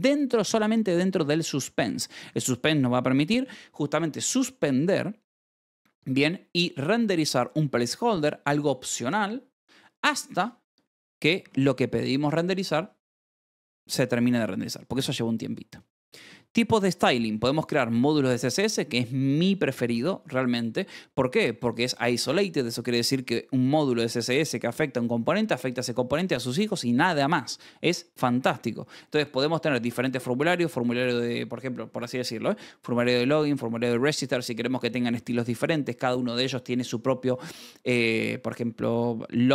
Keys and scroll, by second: 1.5 Escape, 2.1 v, 2.7 Escape, 10.6 e, 12.2 Escape, 14.7 j, 16.2-18.3 typing, 28.5 Escape.